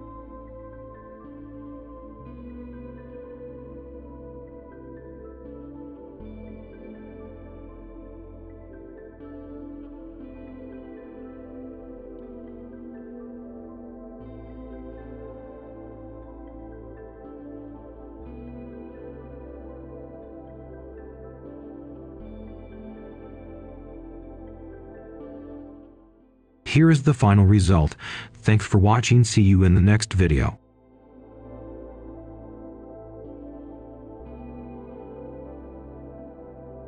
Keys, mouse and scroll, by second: 3.3-4.0 scroll up 1, 4.0-6.1 drag, 7.8-9.6 right drag, 9.7-12.5 ctrl+right drag, 12.7 right click, 12.9 scroll up 1, 13.1 click, 13.1 Escape, 13.6 click, 13.8 right click, 14.3 click, 16.8 ctrl+shift+a, 17.0 middle click, 17.6-19.6 drag, 19.6 scroll down 1, 19.7 scroll up 1, 20.0 right click, 20.1 click, 20.4-22.7 right drag, 22.7-29.3 right drag, 29.3-30.3 drag, 31.0 Delete, 31.9 click, 33.2 super+Right, 34.1 shift+right click, 34.6 click, 35.3-36.8 typing.